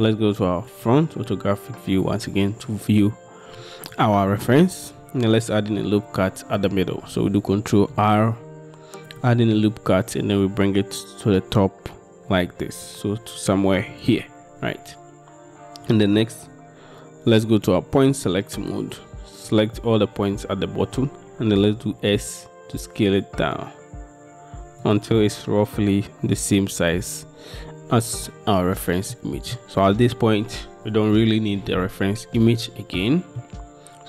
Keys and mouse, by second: 0.8 click, 8.0 ctrl+r, 14.1 click, 18.1-19.9 drag, 21.9 s, 24.9 click, 29.2 middle click, 33.1 middle click.